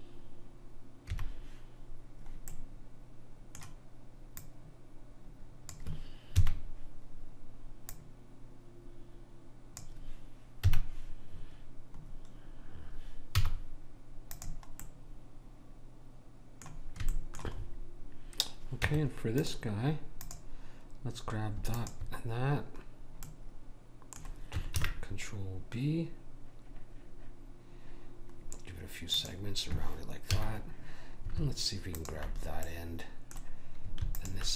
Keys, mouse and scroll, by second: 1.1 KP_1, 2.5 middle click, 4.4 click, 6.3 KP_3, 7.9 click, 10.6 KP_1, 13.4 z, 17.1-18.8 middle drag, 18.8 Tab, 20.2-23.6 drag, 23.3 middle click, 23.6-24.8 middle drag, 24.8 ctrl+b, 30.3 a, 31.9 click, 32.7-33.7 middle drag, 34.0-34.5 middle drag, 34.2 click.